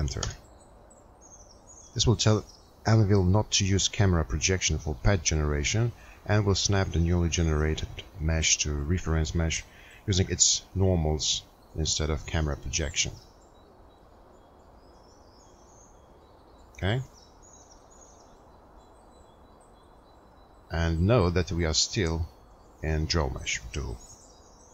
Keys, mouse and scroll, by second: 1.9 Return.